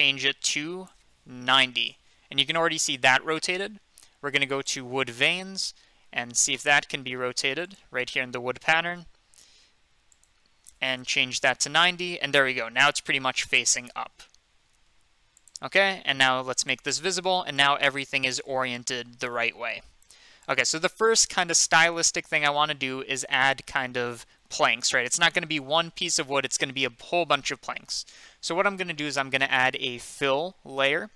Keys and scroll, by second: 1.4-2.2 typing, 11.0-11.8 typing.